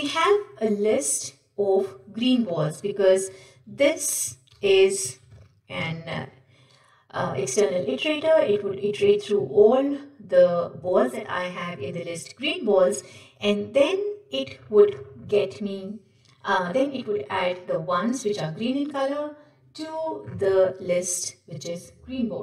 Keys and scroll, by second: 5.3 ctrl+w.